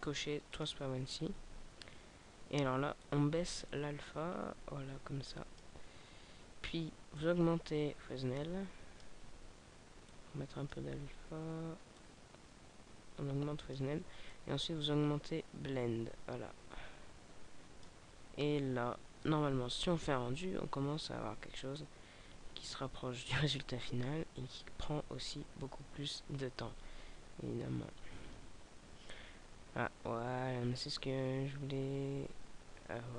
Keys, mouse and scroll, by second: 1.2-1.8 scroll up 2, 2.5-3.0 scroll up 2, 3.0 click.